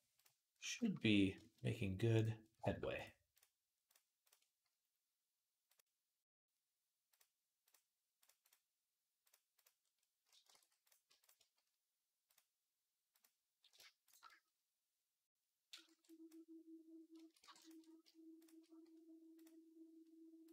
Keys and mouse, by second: 0.0-9.7 middle drag, 3.6 shift+click, 5.5-8.1 drag, 8.2-17.4 right drag, 10.4 ctrl+s, 11.0 click, 12.1-13.9 drag, 15.6 b, 17.2 b, 17.4 shift+click, 17.6 right click, 17.8 shift+click, 18.4-20.5 right drag, 19.1 click, 19.1 middle click, 20.3-20.5 drag, 20.3-20.5 middle drag.